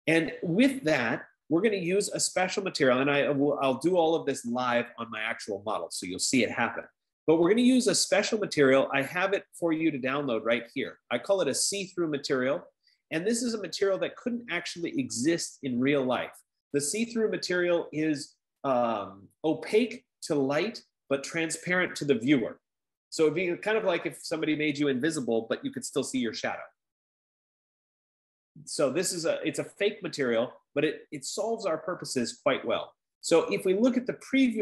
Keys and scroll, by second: 13.4 F15.